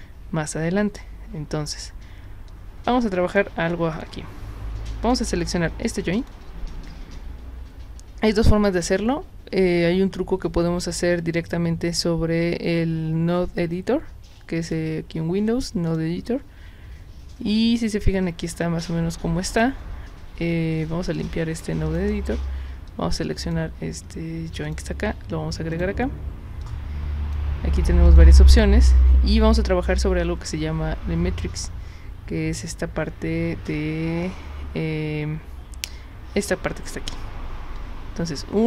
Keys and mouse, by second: 2.5 click, 3.9 click, 5.0 click, 6.2 click, 14.6 click, 15.9 click, 21.9 click, 22.9 click, 24.6 click, 25.7 click, 26.6 click, 28.1 click, 36.4 click.